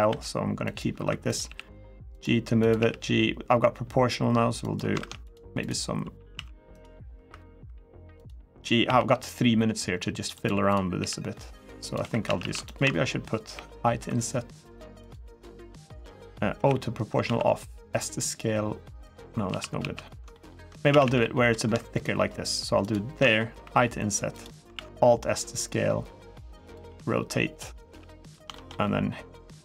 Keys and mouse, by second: 0.4 click, 0.7 1, 1.2 g, 1.9 click, 2.4 click, 2.6 g, 4.4 click, 4.7 ctrl+r, 5.4 click, 6.1 s, 6.5 click, 7.9 click, 8.6 g, 10.1 click, 10.4 click, 10.7 g, 11.6 click, 11.8 3, 12.0 a, 12.2 a, 13.3 i, 14.8 click, 16.3 o, 17.0 alt+s, 18.8 click, 19.2 ctrl+z, 19.6 ctrl+z, 20.1 middle click, 20.4 3, 20.7 a, 20.8 a, 21.0 middle click, 22.6 alt+shift+click, 23.4 i, 24.1 click, 24.5 alt+s, 26.4 click, 26.6 r, 27.4 click, 27.6 s, 28.0 click, 28.3 shift+middle click, 29.1 middle click, 29.5 2, 29.5 1.